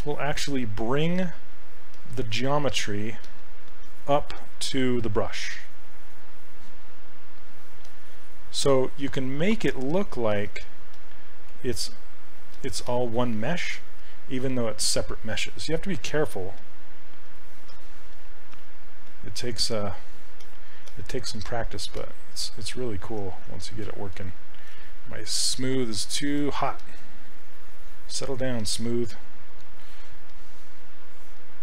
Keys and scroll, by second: 11.9 s, 22.8 ctrl+z, 24.2 ctrl+z.